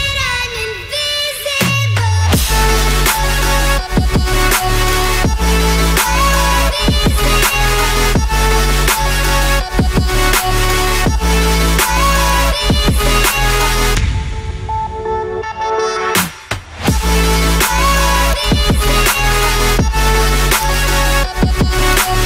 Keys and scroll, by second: 10.9-12.0 typing, 16.3-18.3 typing, 21.0-21.7 typing.